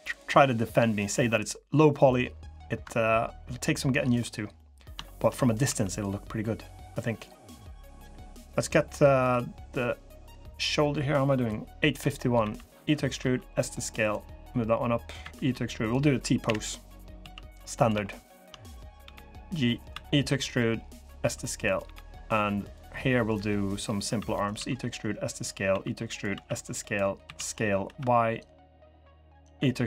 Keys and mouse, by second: 0.9 s, 4.3 click, 4.8 shift+click, 5.4 3, 6.8 click, 8.4-12.2 drag, 12.2 e, 12.9 s, 14.9 e, 16.2 KP_1, 17.0 s, 17.8 shift+click, 18.8 g, 19.7 e, 20.9 s, 21.6 g, 22.7 click, 23.9 e, 24.3 s, 25.4 e, 26.0 s, 27.0 s, 29.3 e.